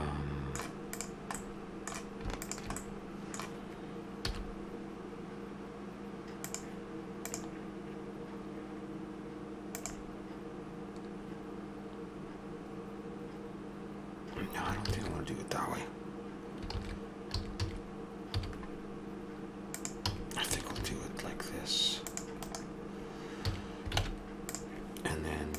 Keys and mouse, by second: 1.0 right click, 1.4-4.1 middle drag, 4.1-6.4 right drag, 4.2 i, 14.9 ctrl+z, 17.3 a, 17.6 a, 18.4 w, 20.1 a, 20.8 ctrl+r, 23.5 a, 24.0 ctrl+Tab.